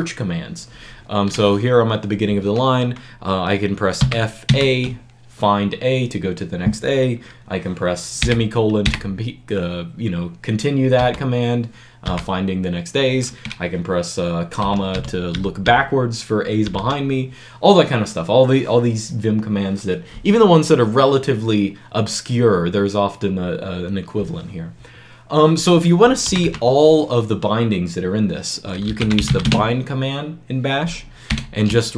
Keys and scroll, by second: 3.9 f, 4.3 a, 8.1-8.7 typing, 10.9 typing, 11.9 ;, 14.5 ,, 14.8 ,, 15.2 ,, 16.4 ,, 16.7 ,, 26.1 c, 26.3 c, 28.5-29.6 typing, 31.1-31.9 typing.